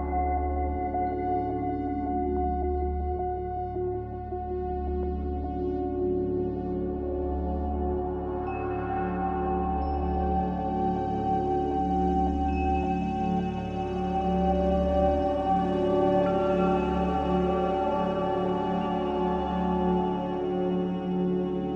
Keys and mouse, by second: 1.6 shift+click, 3.0 m, 5.6 click, 5.6 middle click, 5.6 right click, 6.0-8.8 drag, 6.0-8.8 right drag, 10.9 click, 10.9 right click, 11.1-14.0 middle drag, 19.2 click, 20.2 middle click.